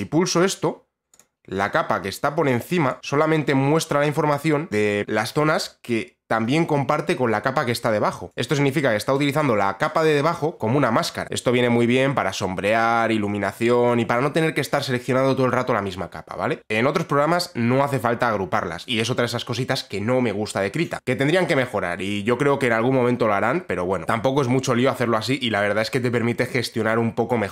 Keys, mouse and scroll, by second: 0.7 click, 4.5 click, 8.3 click, 13.2 click, 16.6-18.9 drag.